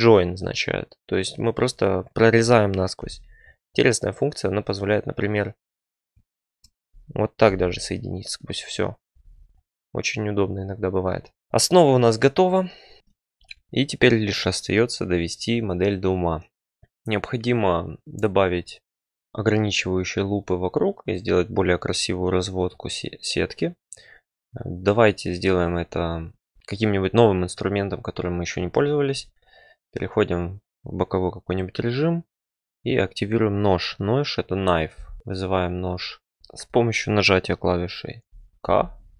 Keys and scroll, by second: 2.9 j, 7.4 j, 9.2 ctrl+z, 38.6 k.